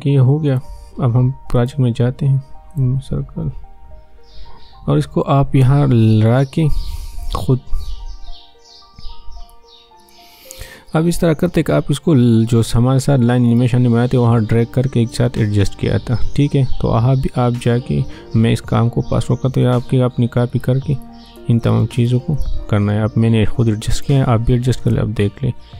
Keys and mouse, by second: 0.5 click, 6.0-10.0 drag, 13.5-24.8 drag, 24.8 space.